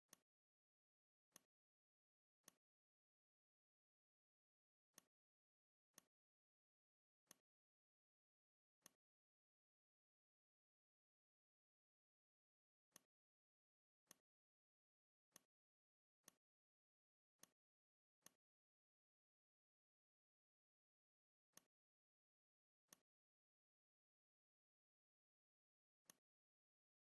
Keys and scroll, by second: 10.5 shift+m, 13.5 v, 26.7 z.